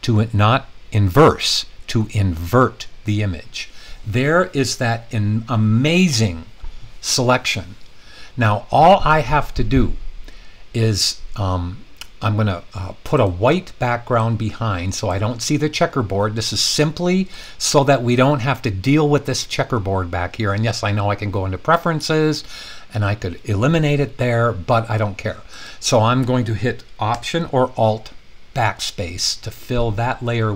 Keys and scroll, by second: 2.4 super+i, 28.6 alt+BackSpace.